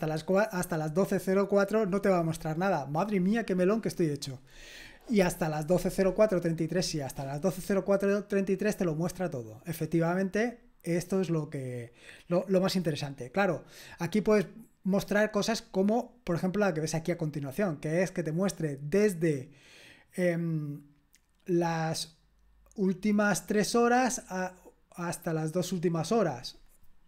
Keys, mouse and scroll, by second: 8.1-9.2 scroll down 4, 9.2 scroll down 1, 9.7-10.1 scroll down 2, 10.8 scroll down 1, 15.7-17.2 drag, 17.4 click.